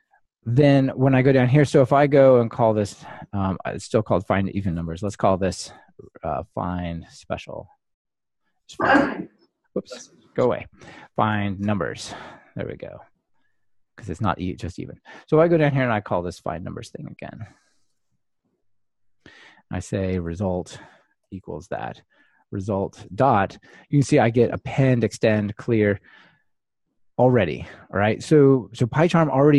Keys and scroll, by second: 5.2 ctrl+alt+t, 11.2 Delete, 18.0 super+c, 21.4 super+v.